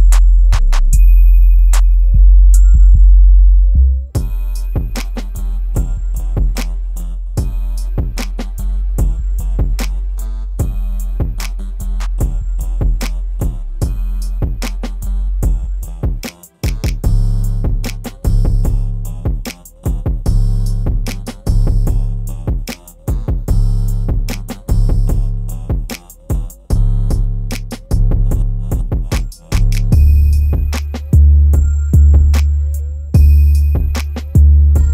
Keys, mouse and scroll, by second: 10.7 click, 10.9-11.7 typing, 12.4 click, 14.1-14.8 typing, 15.3 click, 19.4 click, 24.6 click, 26.4 right click, 27.6 click.